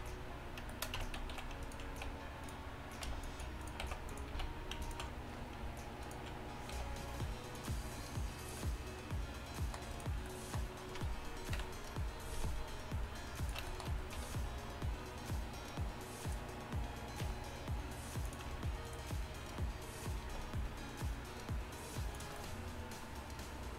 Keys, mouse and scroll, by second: 1.1 Tab, 3.1 c, 3.9 x, 4.4 z, 6.8 g, 9.0 click, 11.6 KP_1, 14.2 r, 17.3 r, 20.3 g.